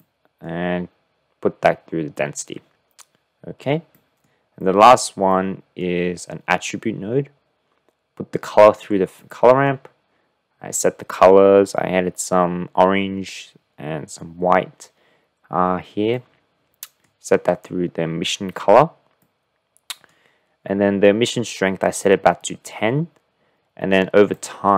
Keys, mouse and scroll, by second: 0.2-0.5 drag, 4.1 click, 4.7 click, 5.5 click, 9.3 click, 16.2 click, 16.4 middle click, 19.2 middle click, 24.3 click.